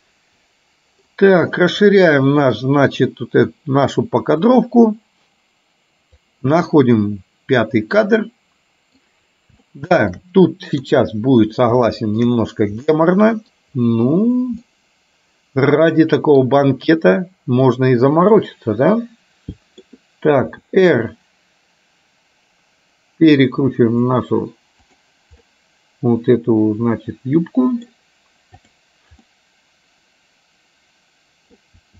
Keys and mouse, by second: 2.0 middle click, 4.7-6.4 drag, 6.7-9.0 middle drag, 9.8 shift+middle click, 10.8 KP_3, 12.0 shift+middle click, 13.0 middle click, 14.8-16.4 middle drag, 18.4-19.9 middle drag, 20.5 r, 25.5-28.0 middle drag, 28.7 click, 29.4-31.7 middle drag.